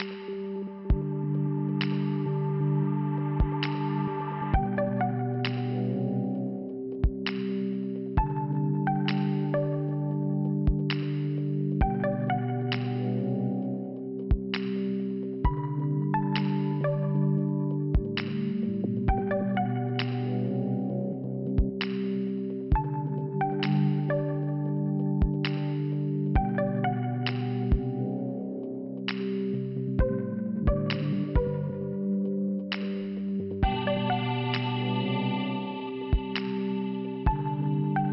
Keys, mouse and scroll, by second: 0.6 p, 3.0 click, 4.7 middle click, 5.4 click, 6.6 click, 7.6 middle click, 8.0 click, 8.1 double click, 9.1 double click, 10.7 middle click, 11.4 scroll up 1, 15.2 click, 16.3 scroll down 1, 17.0 click, 18.4 click, 19.2 click, 19.4 click, 19.7 Return, 20.9 click, 21.7 scroll down 2, 23.2 click, 27.3 click, 28.4 5, 30.4 click, 31.8 scroll up 2, 33.2 click, 35.0 click, 35.1 click, 35.7 click, 36.2 click, 37.2 click.